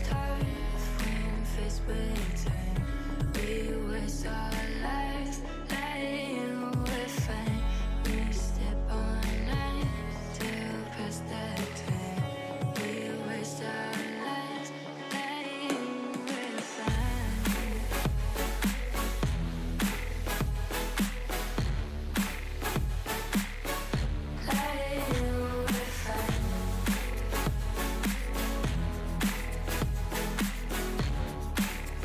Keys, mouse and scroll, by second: 4.9 click, 4.9 middle click, 8.2 click, 11.5-12.5 drag, 17.7 click, 29.1 middle click, 29.6 Tab, 30.0-30.8 middle drag, 30.8 scroll.